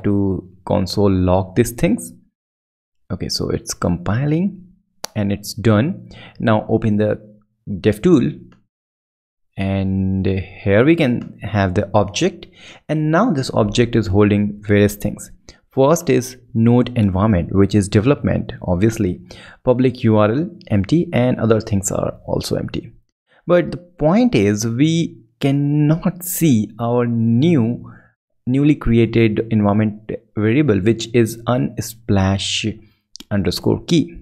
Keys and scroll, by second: 5.2 ctrl+Left, 5.9 ctrl+super+Left.